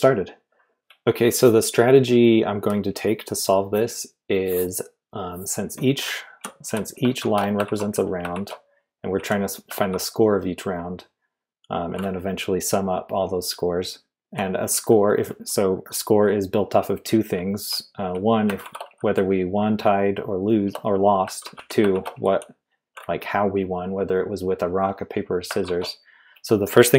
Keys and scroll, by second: 0.7 Return, 0.7 w, 6.0-9.8 typing, 14.0-14.7 typing, 17.1-19.5 typing, 21.2-22.8 typing, 25.6 shift+v.